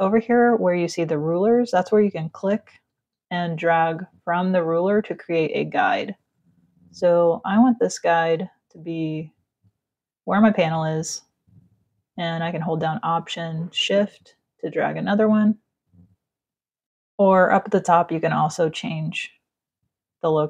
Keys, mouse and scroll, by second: 0.4 click, 2.6 ctrl+z, 3.2 click, 7.5 click, 13.3 alt+click.